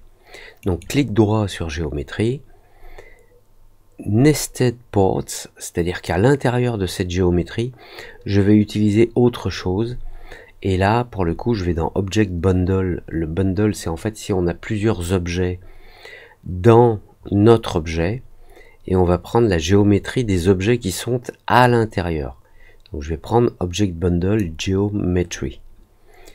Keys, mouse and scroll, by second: 0.5 right click, 21.5 click.